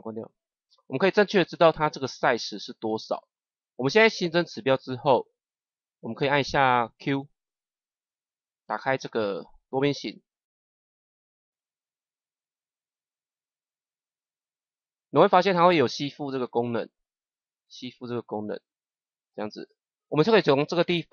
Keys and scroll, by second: 7.4 q, 10.4 ctrl+z.